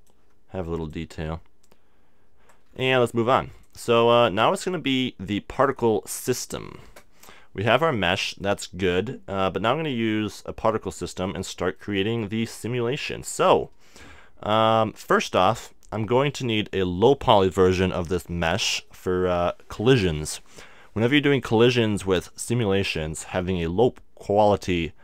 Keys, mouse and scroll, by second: 6.8-10.6 middle drag, 11.0-18.6 middle drag.